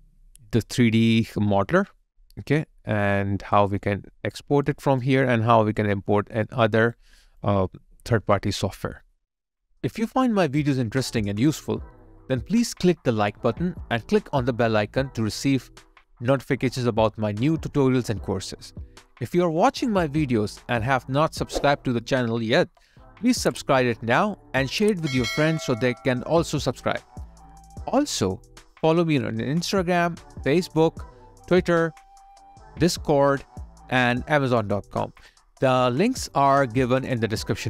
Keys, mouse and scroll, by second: 3.2 alt+middle click, 4.7 alt+click, 5.3 alt+right click, 5.8 alt+middle click, 6.5 alt+right click, 7.4 alt+click, 8.6 alt+right click, 17.7 alt+click, 20.6 alt+right click, 27.4 alt+click, 28.5 alt+click.